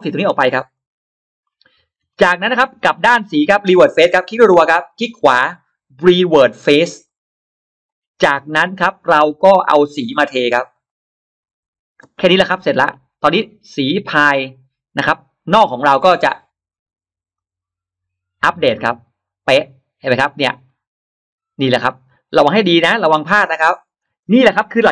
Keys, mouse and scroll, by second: 0.6 click, 1.3-1.6 scroll up 2, 1.8 scroll down 2, 2.5 space, 2.6 scroll up 2, 4.1 click, 4.4 click, 4.6 click, 5.0 right click, 6.9 click, 7.7 click, 9.8 click, 10.6 click, 11.9 space, 12.6-13.4 drag, 16.2-16.9 scroll up 1, 17.2 click, 19.3 click, 19.9 scroll down 2, 20.5-20.8 scroll up 2, 22.2 click.